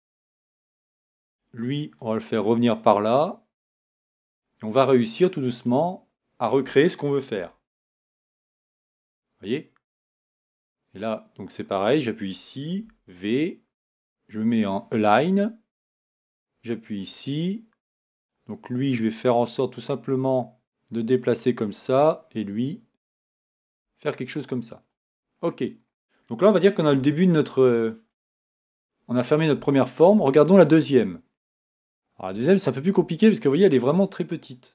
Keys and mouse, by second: 7.4 g, 12.8 v, 23.7 g, 29.2 click.